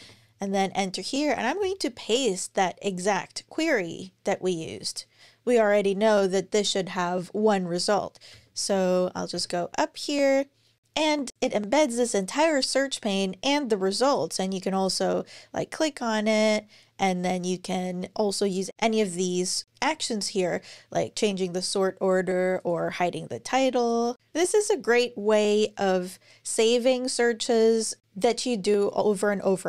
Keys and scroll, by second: 1.1 super+v, 8.1-9.2 scroll up 1.